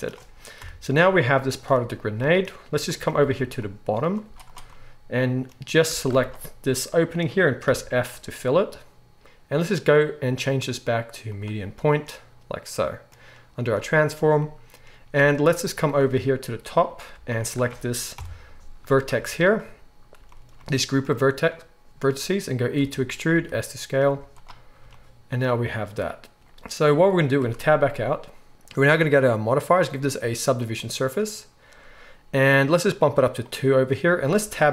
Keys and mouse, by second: 0.6 KP_1, 1.8 z, 3.2 alt+a, 3.5-6.2 drag, 4.2 z, 5.9 alt+a, 6.2-9.1 alt+shift+middle drag, 7.6 f, 9.2 ctrl+z, 9.2 middle click, 9.2 s, 10.0-17.3 drag, 15.1 alt+a, 17.3 alt+shift+middle click, 18.1 click, 18.1 KP_1, 18.1 middle click, 18.8 shift+middle click, 19.1 z, 20.1 shift+middle click, 21.0-24.1 middle drag, 22.8 e, 24.1 z, 24.8-29.0 shift+middle drag, 27.4 Tab, 29.0-34.7 drag, 34.4 Tab.